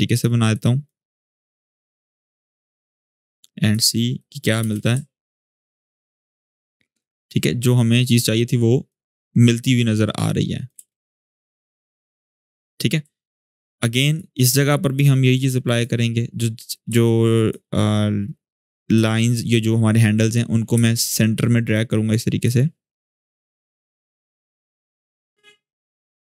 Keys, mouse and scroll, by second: 4.4 space, 4.8-5.2 scroll down 1, 6.0 shift+scroll down 2, 6.7-8.9 drag, 8.9 shift+scroll down 1, 9.9-10.5 click, 10.5 space, 12.5 click, 13.5-14.1 drag, 18.7-19.3 drag, 21.9-22.5 drag, 24.5 space.